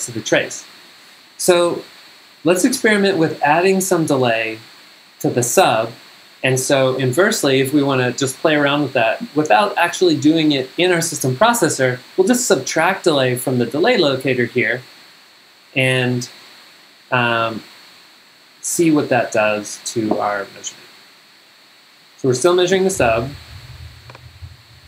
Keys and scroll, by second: 22.8 g.